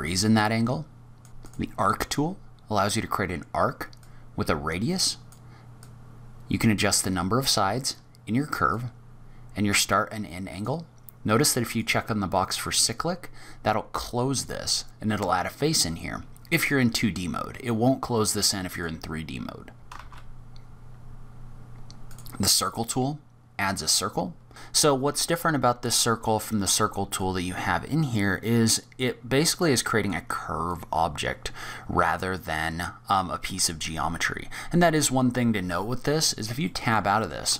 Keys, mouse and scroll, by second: 1.3 shift+a, 2.1-3.9 scroll up 5, 3.9 click, 3.9 scroll up 2, 5.7 click, 8.7 click, 11.6 click, 16.5 click, 18.6 click, 19.8 Tab, 19.8 click, 19.8 scroll down 5, 19.8 shift+a, 19.9 shift+a, 22.5-23.0 scroll down 4, 23.2-24.1 scroll up 1, 24.1-24.5 scroll up 1, 27.0 click, 30.6 click, 34.3-35.0 scroll up 3, 35.0 middle click, 35.9-36.6 scroll up 2, 36.6 middle click, 37.2 shift+middle click.